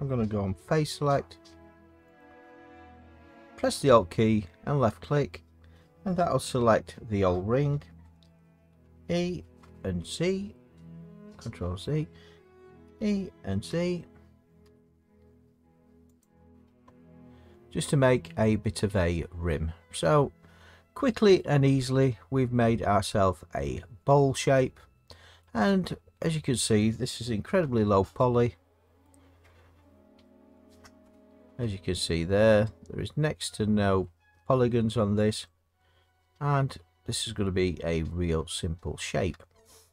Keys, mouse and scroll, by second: 2.2 alt+click, 8.7 e, 10.7 z, 11.2 click, 11.6 ctrl+z, 12.8 e, 13.7 z, 14.6 z, 16.2 click, 17.4 Tab, 21.4 middle click, 23.1 middle click, 25.4 middle click, 26.6 middle click, 27.6 Tab, 29.0 middle click, 34.0 middle click, 34.9 middle click, 38.1 middle click, 39.3 Tab.